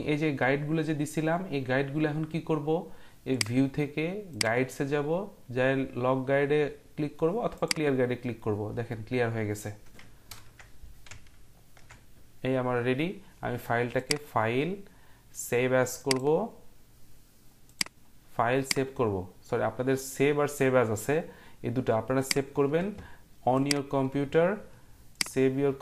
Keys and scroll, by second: 10.3 ctrl+0.